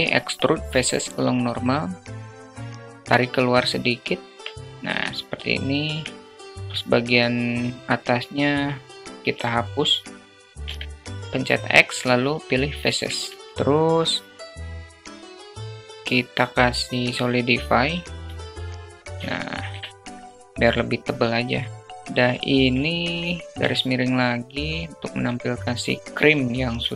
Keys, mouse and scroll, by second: 2.9 Tab, 3.7-4.5 alt+middle drag, 5.3 3, 6.1 click, 9.2 x, 11.4 alt+middle click, 12.1 Tab, 12.6-12.9 alt+middle drag, 13.9-16.7 drag, 17.0 middle click, 18.0 shift+middle click, 20.2-21.8 drag, 25.8 drag.